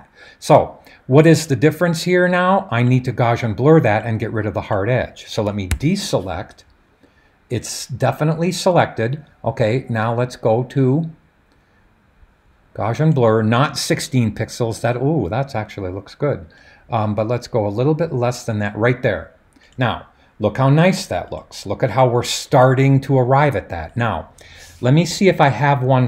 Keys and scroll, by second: 5.7 super+d.